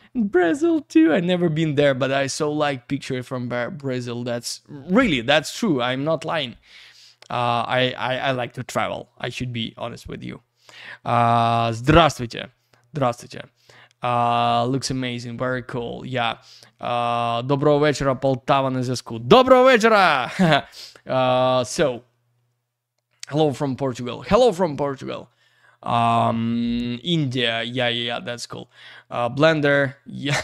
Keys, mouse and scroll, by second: 6.7 click, 21.9 click, 29.6 click.